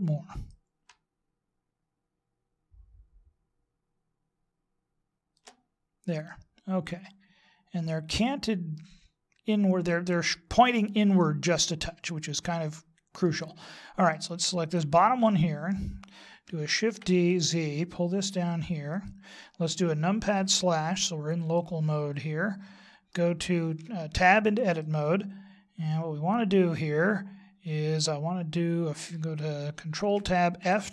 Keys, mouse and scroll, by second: 0.5 click, 6.2 middle click, 12.0 middle click, 15.4 right click, 16.8 shift+d, 20.3 KP_Divide, 21.5 middle click, 23.8 Tab, 24.8 middle click, 30.0 ctrl+Tab.